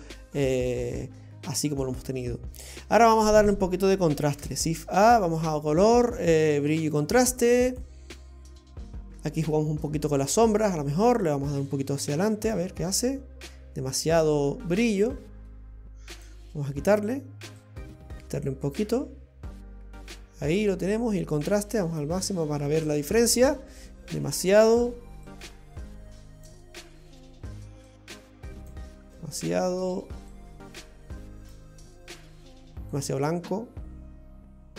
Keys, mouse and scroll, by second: 0.2-1.6 scroll down 5, 2.2-3.6 scroll up 12, 4.3 shift+a, 9.7-10.1 scroll up 5, 10.5 middle click, 10.7 middle click, 11.0 middle click, 11.7 click, 14.0 click, 17.6 click, 21.2 click, 23.8 click, 25.3 click, 27.9 click, 30.3 click, 32.9 click.